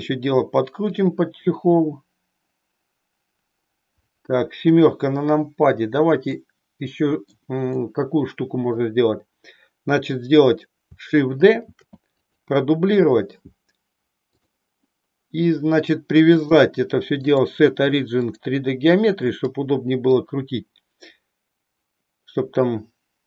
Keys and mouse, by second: 1.0 click, 4.5 KP_7, 6.3-7.4 middle drag, 7.9-9.0 middle drag, 11.7 shift+d, 12.3 click, 14.3 click, 16.3-18.5 drag, 19.3-20.3 middle drag, 21.0-23.2 drag.